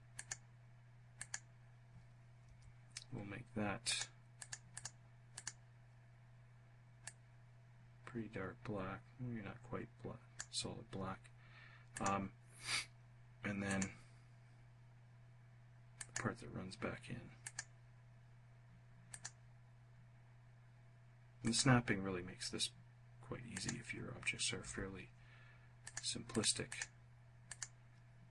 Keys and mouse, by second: 0.7 click, 2.0 F1, 3.4 click, 3.9 click, 4.3 click, 4.9 click, 6.6-10.0 drag, 11.4 click, 13.2 click, 15.6 click, 16.9 click, 18.6 click, 20.9 click, 23.1 click, 24.1 f, 25.4 click, 25.8 click, 26.2 click, 27.0 click.